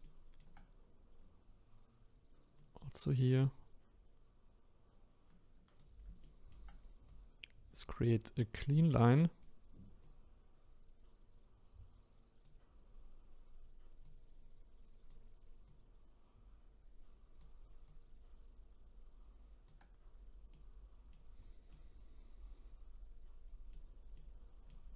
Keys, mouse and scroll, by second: 0.0-2.6 shift+middle drag, 2.6-5.6 drag, 6.2 shift+middle click, 7.1-13.0 drag, 14.0-20.5 drag, 20.5 middle click, 21.4-21.7 scroll down 1, 21.7-24.9 middle drag.